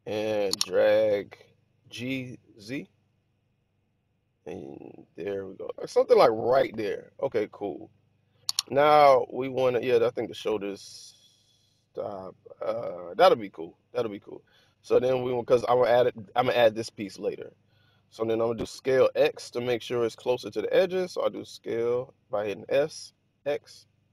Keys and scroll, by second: 0.9 g, 2.0 z, 21.3 s, 22.9 x.